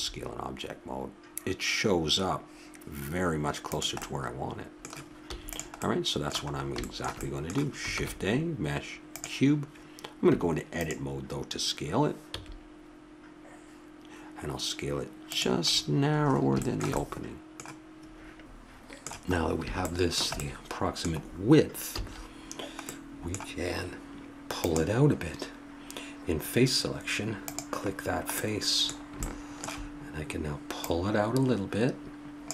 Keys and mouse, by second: 4.0-6.2 middle drag, 5.2 x, 7.9 shift+a, 10.3 Tab, 12.3 s, 16.1-22.0 middle drag, 22.0 a, 22.4 middle click, 24.7-26.5 drag, 27.6 click, 28.1 middle click, 29.0 click, 29.2 middle click, 30.9-32.5 drag.